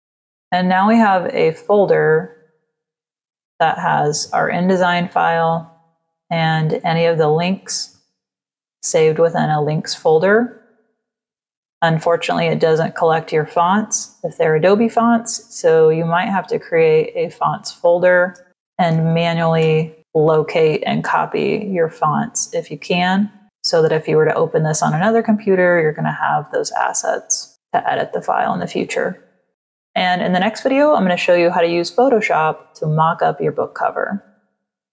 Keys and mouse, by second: 0.3 click, 2.0 click, 6.1 click, 7.8 click, 15.6 right click, 18.0 click, 18.4-19.5 typing, 21.2 click.